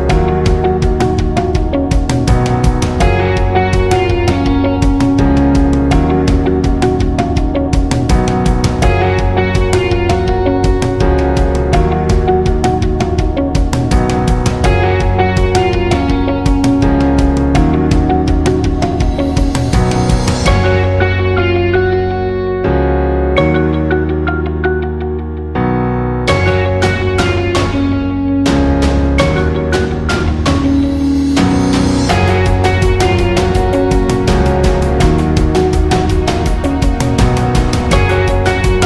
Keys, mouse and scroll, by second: 0.0 space, 0.2-2.7 drag, 3.1 alt+scroll up 1, 3.4 click, 4.6-6.9 alt+drag, 6.9-11.7 alt+shift+drag, 11.7-36.1 alt+drag, 36.1 ctrl+g, 36.5-38.8 drag.